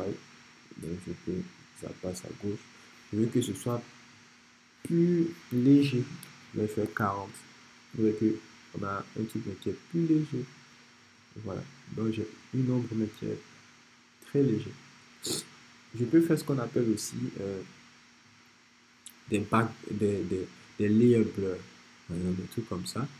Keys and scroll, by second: 5.9 shift+4, 6.3 shift+0, 6.9 Return.